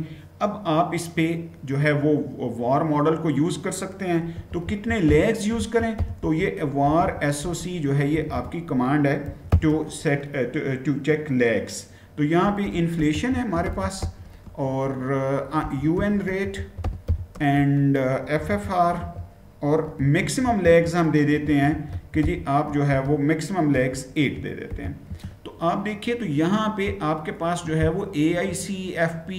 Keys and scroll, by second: 3.8-9.5 typing, 12.0-24.5 typing, 24.8 Return.